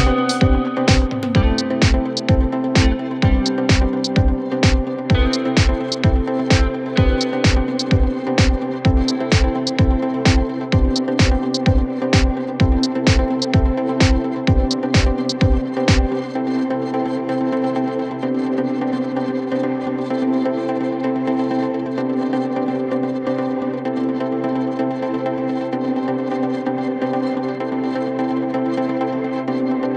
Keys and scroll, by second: 10.5 4, 15.3 b, 16.2 3, 16.8 4, 17.6 m, 18.9 ctrl+F1, 19.8 1.